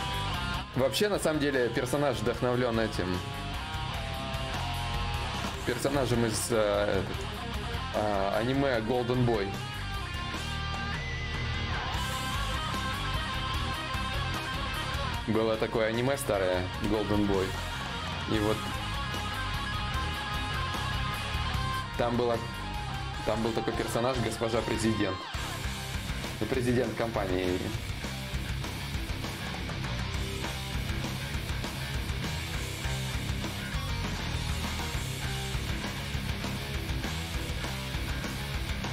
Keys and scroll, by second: 16.5 d, 24.2 b, 26.6-28.3 typing.